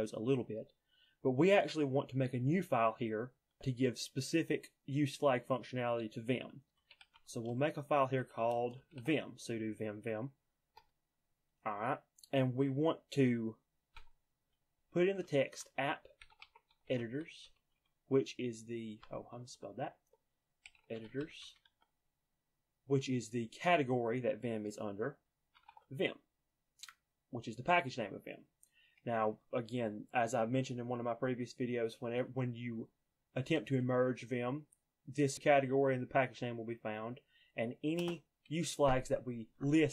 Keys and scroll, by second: 6.6-9.7 typing, 14.0-22.2 typing, 25.4-26.2 typing.